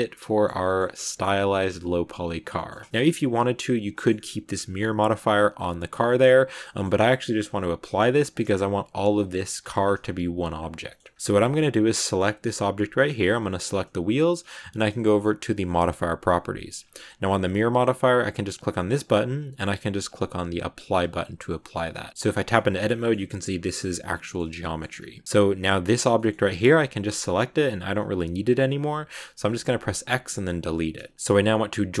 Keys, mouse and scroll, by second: 0.7 scroll up 1, 0.9 middle click, 1.5 scroll down 2, 1.7 middle click, 2.6-3.2 scroll up 2, 3.2 middle click, 3.7 g, 6.0-8.2 middle drag, 8.2 right click, 9.0 a, 9.8-10.3 scroll down 1, 10.5-10.8 scroll up 2, 10.8 middle click, 11.1-11.8 scroll down 1, 11.8 right click, 13.2 scroll up 1, 15.6 click, 16.7 click, 18.5-21.4 drag, 21.4 middle click, 21.9 Tab, 22.1 a, 22.4-24.3 middle drag, 24.3 Tab, 24.5 middle click, 24.8 scroll down 1, 25.7 right click, 26.0-27.1 shift+middle drag, 27.1 g, 31.8 right click.